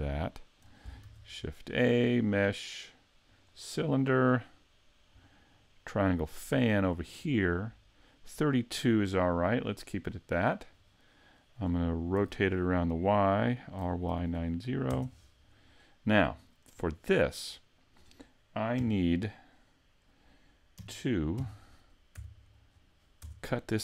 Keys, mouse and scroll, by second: 0.1 shift+middle click, 1.0 shift+a, 5.5 click, 9.9 click, 12.2 r, 16.4 shift+middle click, 17.1-17.5 scroll up 2, 17.5 middle click, 18.8 KP_3, 20.8 KP_Decimal, 21.4 KP_5, 22.1 z, 22.7-23.2 scroll down 4, 23.2 Tab.